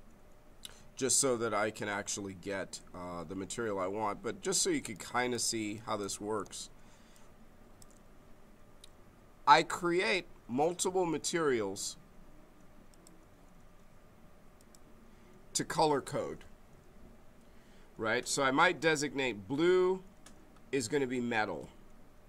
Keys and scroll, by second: 6.4 space.